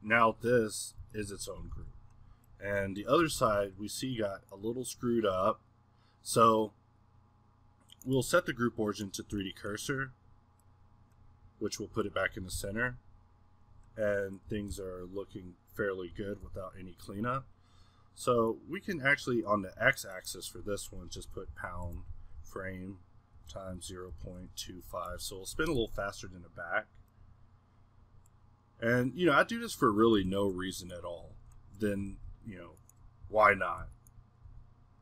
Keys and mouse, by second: 0.5-1.7 middle drag, 2.7-3.4 middle drag, 9.4-12.3 middle drag, 12.3 r, 13.9-14.4 middle drag, 14.4 r, 15.5-16.4 middle drag, 16.4 n, 18.7-25.8 drag, 26.9-30.0 middle drag, 30.0 Escape, 31.1 middle click, 31.2 z, 32.8-33.2 middle drag, 33.2 z, 33.8 a, 34.6 z.